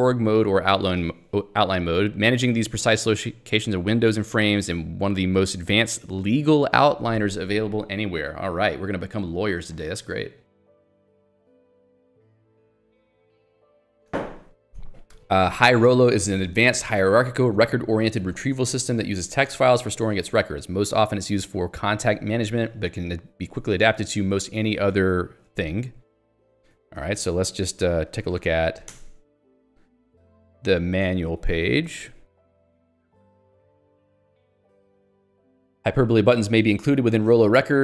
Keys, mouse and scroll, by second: 26.7 Escape, 27.0 j, 28.0 l, 29.1 alt+Return, 31.4 Escape, 32.4 Escape, 32.8 j, 35.6 k.